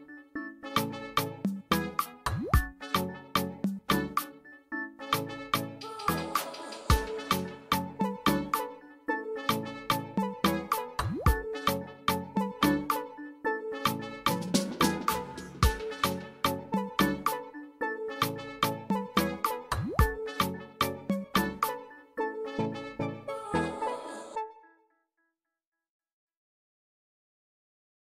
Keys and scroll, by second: 22.1 \.